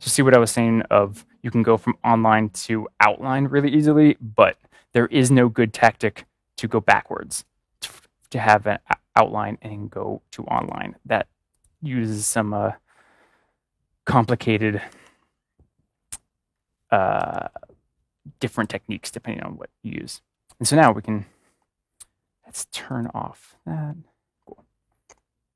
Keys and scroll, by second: 14.8 ctrl+-, 17.1 ctrl+=.